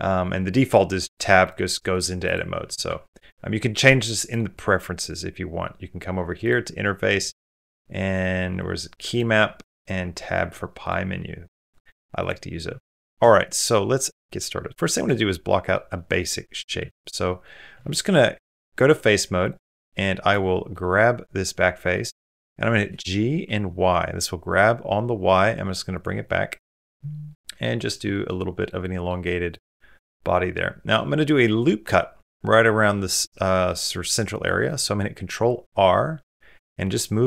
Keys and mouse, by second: 0.8 click, 1.8 click, 2.7 Tab, 4.3 click, 12.5 shift+middle click, 12.8 middle click, 13.4 middle click, 13.8 shift+middle click, 14.1 middle click, 14.5 middle click, 14.9 middle click, 15.3 middle click, 15.8 middle click, 16.7 3, 16.9 click, 17.1 middle click, 17.6 shift+middle click, 17.9 middle click, 19.6 middle click, 20.5 middle click, 21.8 middle click, 22.9 g, 26.1 middle click, 27.1 middle click, 27.6 middle click, 27.9 shift+middle click, 28.2 middle click, 28.6 middle click, 29.0 middle click, 29.5-30.7 middle drag, 33.5 middle click, 34.3 click, 35.4 ctrl+r.